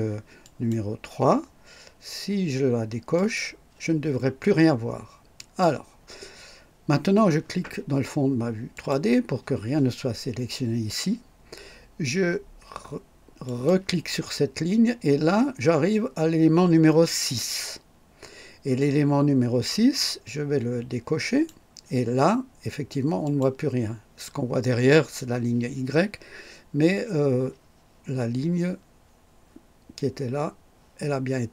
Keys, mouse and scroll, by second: 0.4 click, 3.1 click, 5.3 click, 8.7 click, 13.4 click, 21.2 click, 23.2 click.